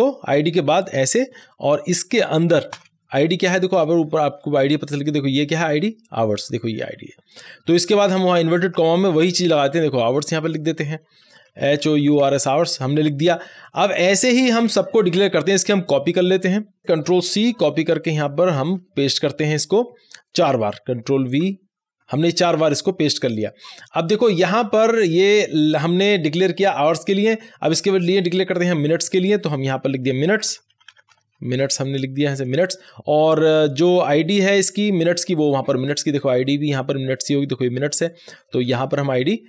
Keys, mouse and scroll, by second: 0.9 shift+Return, 1.3 shift+9, 2.7 ', 3.6 scroll up 1, 4.7-6.0 scroll down 1, 6.0-8.1 drag, 8.1 scroll down 1, 10.4 click, 11.4-12.6 typing, 13.6 click, 14.5 ;, 15.9-17.4 drag, 17.4 ctrl+c, 18.0 click, 18.8 Return, 19.4 Right, 20.4 click, 20.7 Return, 21.0 ctrl+v, 21.4 Return, 21.8 ctrl+v, 23.4-25.7 scroll down 1, 28.1-30.4 drag, 30.4-32.8 typing, 33.6 click, 35.8 scroll up 1, 38.3 scroll down 1.